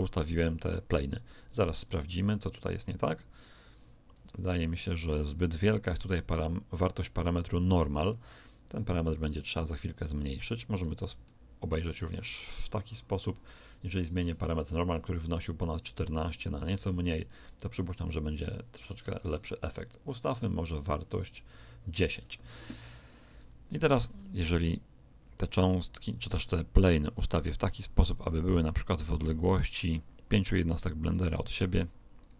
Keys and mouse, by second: 0.8 r, 2.4 right click, 2.9 r, 8.7 right click, 9.1 r, 11.2-13.1 middle drag, 14.5 click, 23.8 right click, 24.1 r, 26.2 click, 31.0-32.3 right drag.